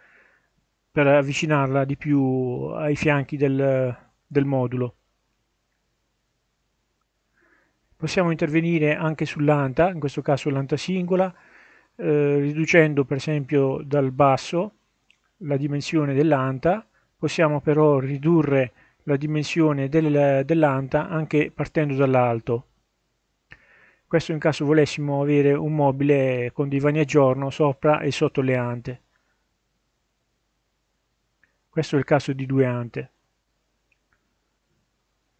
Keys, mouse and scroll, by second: 2.1 click, 3.7-5.3 middle drag, 5.6-6.6 scroll up 2, 10.3-15.3 drag, 15.9-17.1 middle drag, 17.2-17.5 scroll down 1, 23.3-27.6 drag, 28.1-28.6 scroll down 1, 28.6-29.8 middle drag, 34.2 click, 35.0-35.3 middle drag.